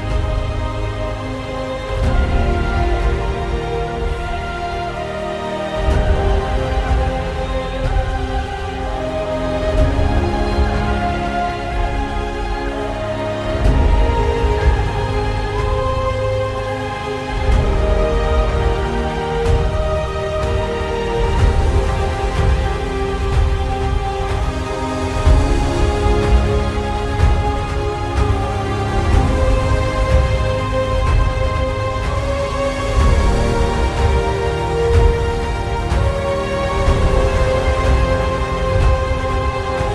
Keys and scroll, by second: 6.5 alt+space, 8.7 space, 12.3 alt+shift+space, 13.7 3, 16.1 ctrl+z, 17.7 space, 22.0 space, 24.7 space, 25.7 space, 29.6 alt+space, 31.2 alt+space, 33.1 alt+space, 34.7 alt+space, 35.7 space, 36.6 space, 38.6 alt+space.